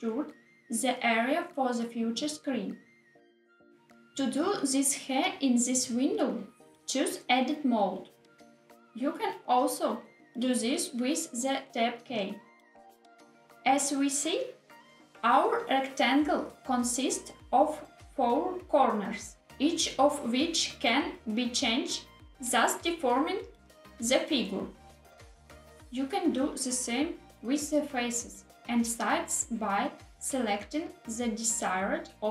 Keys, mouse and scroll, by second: 5.7-7.3 drag, 10.0 Tab, 12.2 Tab, 28.6 click, 29.8 click, 32.1 click.